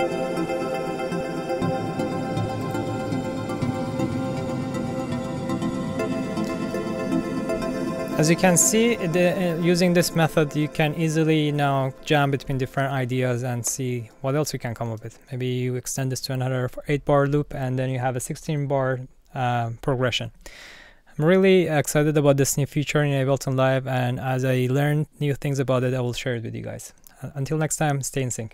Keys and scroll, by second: 6.7 b, 7.8 space.